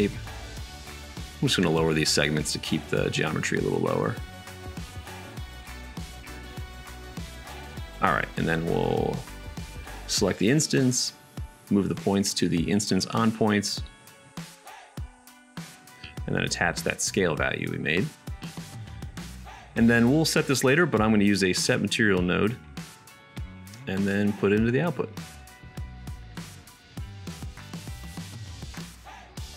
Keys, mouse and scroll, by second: 3.1-4.7 middle drag, 5.9 shift+a, 8.2 BackSpace, 8.4 BackSpace, 12.5-18.3 middle drag, 20.1 shift+a, 23.1-29.2 middle drag.